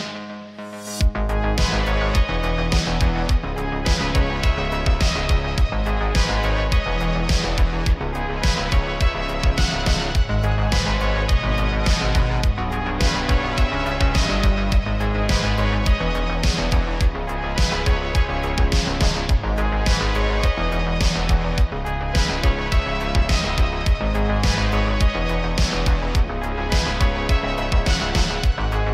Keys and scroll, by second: 0.7 shift+s, 0.8 shift+s, 8.7 r, 16.4 g, 16.7 x, 16.8 x, 21.2 r, 22.5-24.1 typing, 26.2 r.